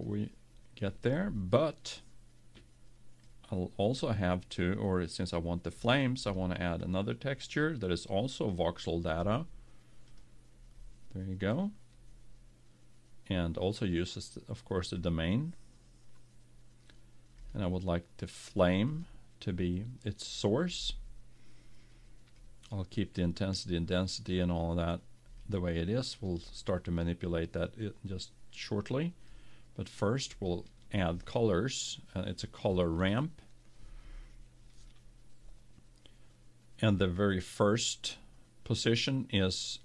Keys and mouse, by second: 0.0 F12, 0.0-1.5 drag, 3.2-5.0 drag, 5.1-8.0 drag, 8.3-10.0 drag, 13.6-15.5 drag, 17.5-19.1 drag, 22.4-24.1 drag, 25.4-27.7 drag, 28.6-32.0 drag, 32.6-34.4 drag.